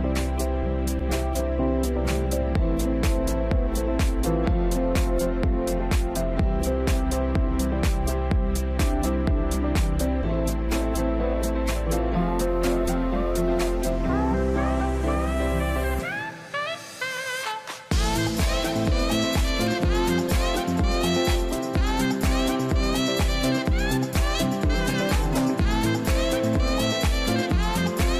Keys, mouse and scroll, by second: 1.2 ctrl+KP_0, 2.0 a, 3.4 a, 5.9 a, 6.1 ctrl+l, 19.6 ctrl+l.